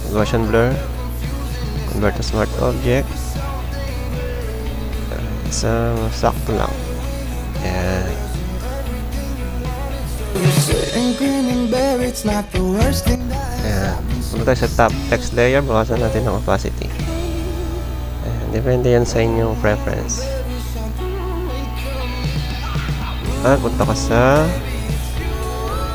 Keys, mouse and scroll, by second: 4.0 click, 18.5 click, 19.3-21.1 drag, 21.3 click, 22.8 click.